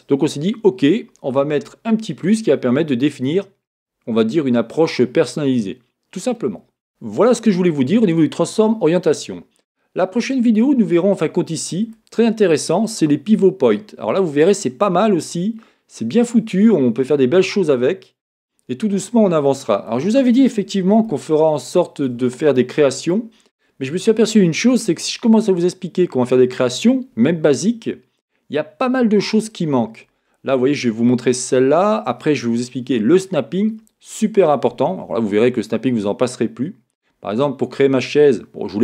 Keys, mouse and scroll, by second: 17.4-38.8 middle drag.